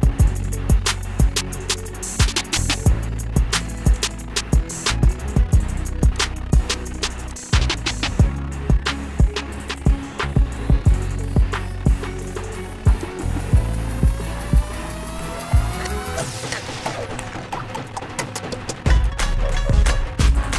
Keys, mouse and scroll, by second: 3.9 click, 4.2 click, 6.4 click, 7.6 click, 13.3 click, 16.0 shift+click, 20.1 click.